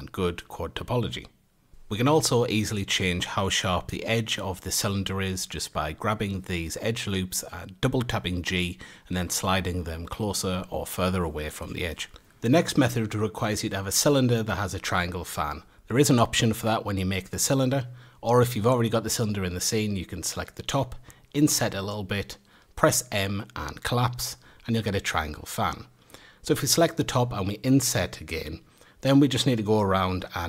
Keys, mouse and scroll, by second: 0.0 a, 0.7 alt+shift+click, 1.3 s, 3.0 a, 3.3 click, 3.9 a, 4.2 alt+shift+click, 5.1 g, 7.3 Tab, 7.7-10.7 scroll down 1, 11.1 F8, 11.8 shift+a, 15.7-18.2 drag, 18.2 Tab, 19.5 3, 19.8 click, 20.6 i, 21.7 m, 24.1 3, 24.4-25.0 middle drag, 25.0 click, 29.7-30.1 shift+middle drag.